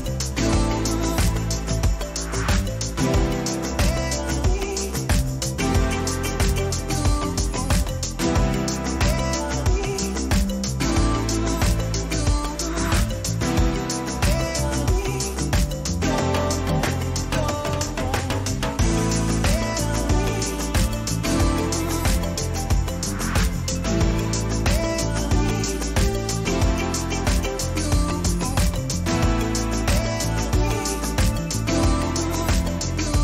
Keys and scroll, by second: 5.3 Return, 6.3 ctrl+-, 7.2 ctrl++, 8.7 ctrl+-, 14.2 space, 31.1 Return.